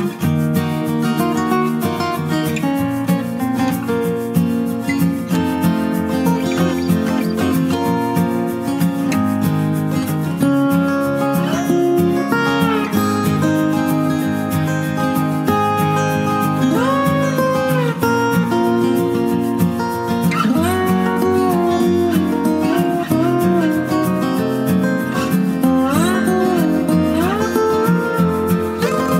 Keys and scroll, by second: 0.0 ctrl+z, 20.6 ctrl+Return, 25.7 ctrl+j.